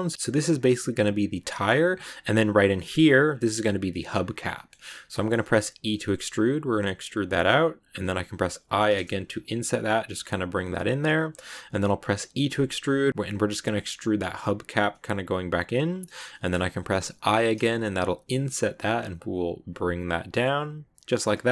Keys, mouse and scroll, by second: 1.4 middle click, 1.7-2.5 scroll up 1, 3.9 s, 4.4 middle click, 4.6-5.1 scroll up 1, 5.1 middle click, 5.7 e, 16.2 middle click, 17.1 i, 21.4 middle click.